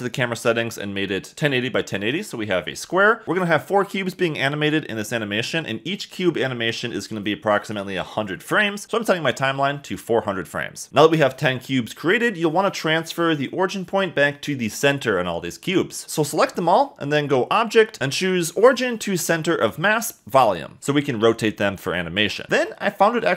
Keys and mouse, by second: 0.4-1.4 drag, 1.2 0, 3.2 r, 3.4 Escape, 3.4 g, 10.9 b, 16.5-19.6 drag, 21.0 r, 21.7 Escape, 22.3 middle click.